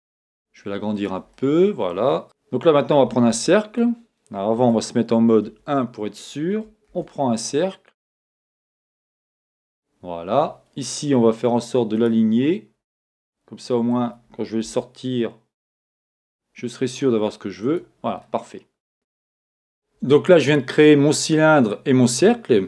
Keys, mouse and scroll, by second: 0.3 s, 1.0 click, 1.3 middle click, 2.2 x, 3.3 shift+a, 4.7 Escape, 5.4 KP_1, 6.9 shift+a, 12.0 click, 12.7 scroll down 1, 13.2 middle click, 14.0-14.6 scroll up 1, 14.6 g, 17.7 click, 18.2 middle click.